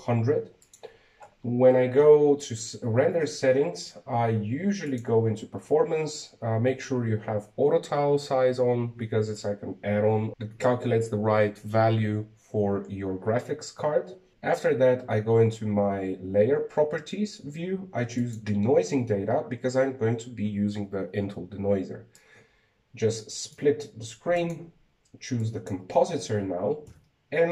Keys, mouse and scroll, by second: 0.5-2.6 drag, 3.2-5.0 scroll up 9, 5.0-6.7 scroll down 6, 6.7 click, 14.8 click, 15.5 click, 20.1 click, 24.0-27.5 drag.